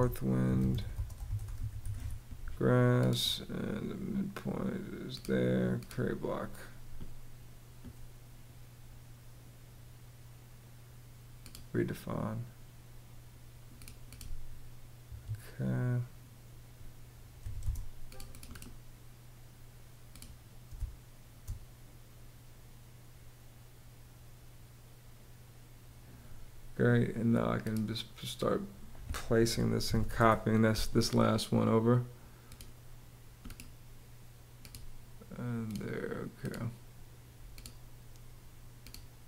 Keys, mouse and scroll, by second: 0.0-1.9 typing, 14.7 Escape, 17.0 m, 17.3 space, 20.4 space, 29.2-30.1 typing.